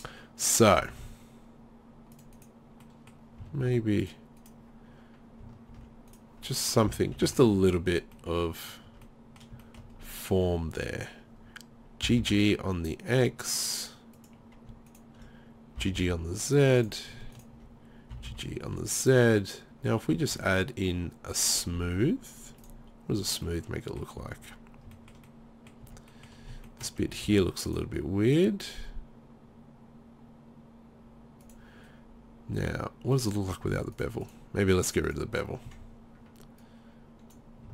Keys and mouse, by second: 0.9 ctrl+r, 3.6 ctrl+r, 5.7 ctrl+r, 6.9 z, 7.1 z, 7.3 Tab, 8.9 Tab, 12.1 g, 14.3-16.6 drag, 15.8 g, 16.9-18.2 drag, 18.2 g, 19.1-20.2 drag, 20.2 Tab, 21.7-23.1 right drag, 25.9 Tab, 27.3 ctrl+r, 31.5-37.7 drag.